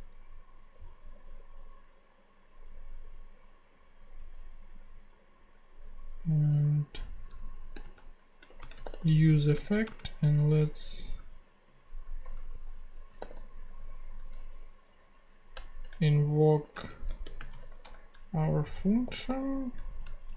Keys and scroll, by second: 7.1 Left, 7.7-9.8 typing, 9.5 Return, 12.2 Return, 12.9-13.8 typing, 14.8 e, 15.5 Return, 16.2-19.8 typing, 20.3 shift+Down.